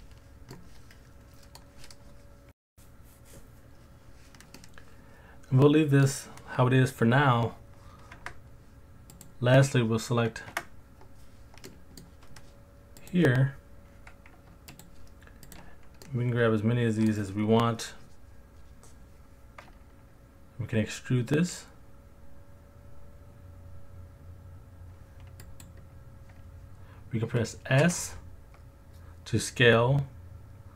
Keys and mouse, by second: 0.5-1.6 middle drag, 4.6-6.0 middle drag, 8.1 Tab, 9.1 click, 10.5 Tab, 11.7 middle click, 13.0 click, 16.0-17.1 middle drag, 20.7 e, 25.4-26.9 drag, 27.8 s.